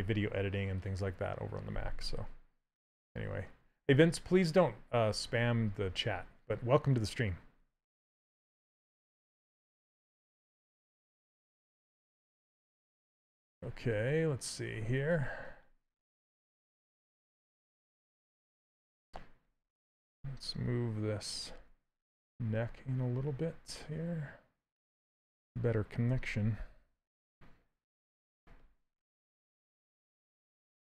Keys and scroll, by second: 17.3 s, 19.8 w, 25.7 q.